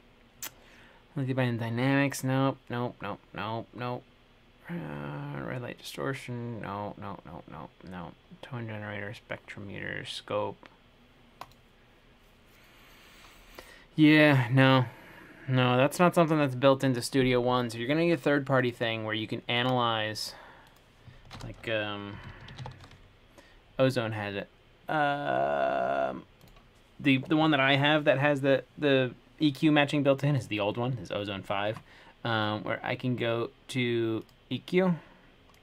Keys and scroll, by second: 22.1-23.3 typing.